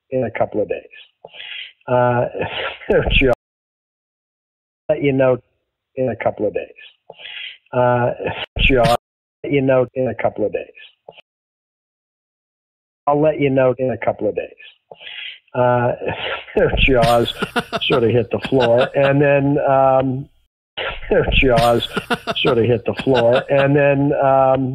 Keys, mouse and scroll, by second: 3.2 space, 4.7 click, 4.8 space, 6.1-7.5 drag, 8.3 ctrl+shift+Delete, 8.9 space, 9.3 click, 9.3 space, 10.6 click, 11.1 space, 11.5 click, 12.8 click, 12.9 space, 17.7 click, 18.6 click, 19.8 click, 20.4 space, 20.6 click, 20.7 space, 22.1 ctrl+s.